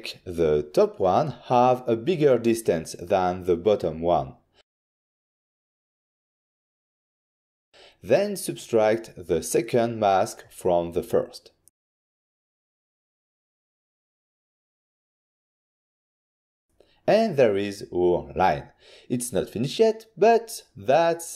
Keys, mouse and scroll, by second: 0.8 click, 3.5 click, 4.0 click, 4.3 click, 4.6 click, 4.7 click, 6.2 typing, 7.6 Return, 9.0 ctrl+shift+click, 9.7 ctrl+shift+click, 10.8 ctrl+shift+click, 11.2 ctrl+shift+click, 11.7-12.1 typing, 14.7 Return, 15.5 click, 16.1 click, 16.6 click, 17.0 click, 18.5 ctrl+shift+click.